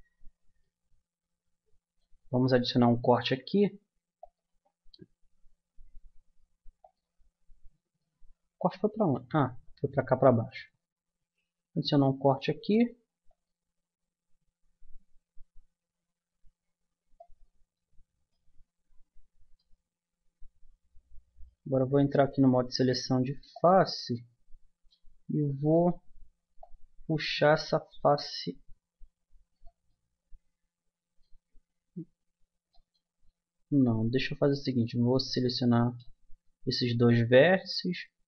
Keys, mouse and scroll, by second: 3.2 ctrl+r, 7.4-9.7 middle drag, 9.1 ctrl+z, 12.0 ctrl+r, 22.1-23.5 middle drag, 23.5-25.1 drag, 24.8 right click, 25.1-28.2 middle drag, 28.2 click, 29.9 middle click, 32.7 middle click, 34.6-35.8 drag, 35.8 middle click, 36.4 click, 36.5 right click, 37.4 middle click.